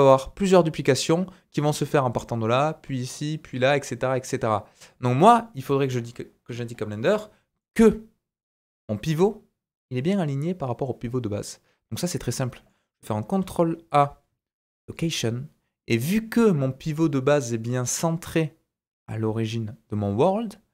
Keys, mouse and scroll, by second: 0.9-16.9 drag, 7.1 middle click, 7.6-10.9 scroll up 2, 12.1 middle click, 13.4 ctrl+a, 16.9-20.7 middle drag.